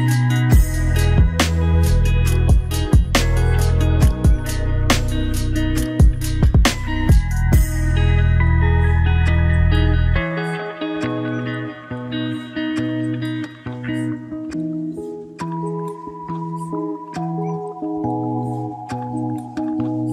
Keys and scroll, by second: 19.6 ctrl+-.